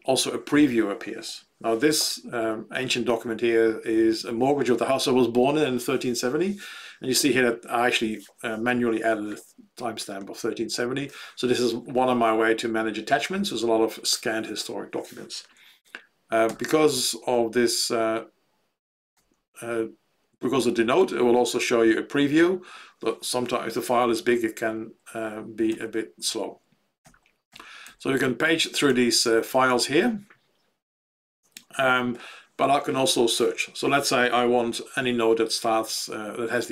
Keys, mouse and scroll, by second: 19.1 Down, 25.7 Down, 27.4 Down, 27.8 Down, 28.4 Down, 28.8 Down, 29.3 Down, 29.4 Down, 30.4 Down.